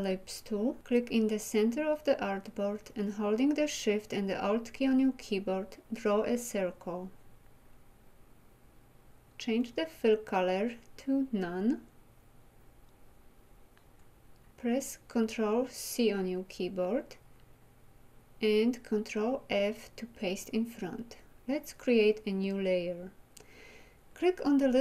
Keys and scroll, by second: 15.3 ctrl+c, 19.0 ctrl+f.